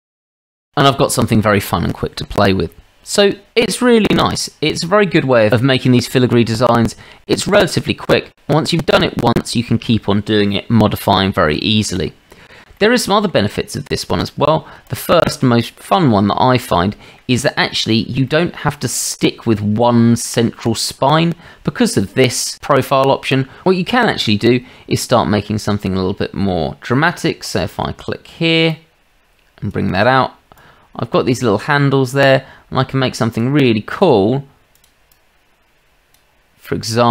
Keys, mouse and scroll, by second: 0.1 Tab, 11.6-12.0 shift+drag, 12.7-13.3 drag, 14.9 click, 15.3 shift+drag, 15.5-17.2 shift+middle drag, 17.5-17.8 shift+middle drag, 17.8 scroll up 1, 18.3-18.9 middle drag, 27.5 click, 28.9 click, 30.6-33.4 drag, 34.0-35.3 drag.